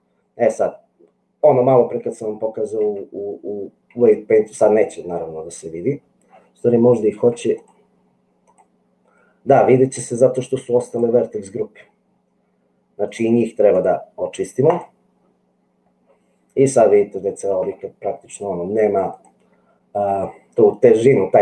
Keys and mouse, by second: 2.9 Tab, 4.2 Tab, 7.3 Tab, 7.7-8.7 drag, 19.1-21.4 drag.